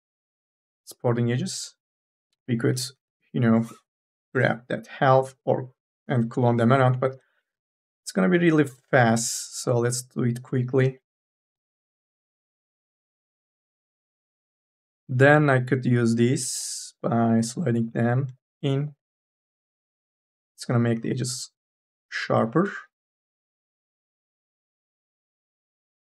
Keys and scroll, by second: 1.4 q, 2.1 space, 2.8 3, 3.8 KP_0, 6.2 k, 6.5 l, 15.1 2, 15.6 e, 16.4 m, 16.8 o, 20.1 q, 25.2 ctrl+z.